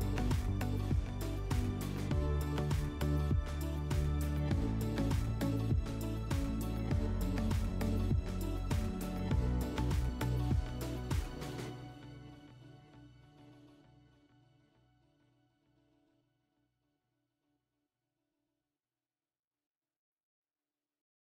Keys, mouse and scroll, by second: 3.0 alt+middle click, 5.0 middle drag, 6.1 click, 6.6 click, 8.8-10.4 drag, 10.5 F4, 17.1 click.